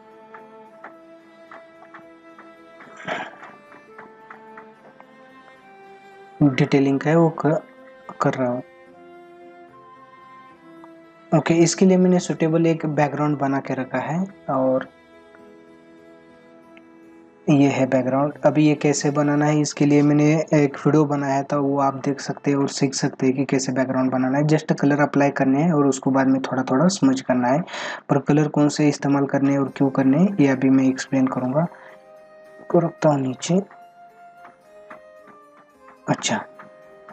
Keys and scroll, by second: 5.0 ctrl+=.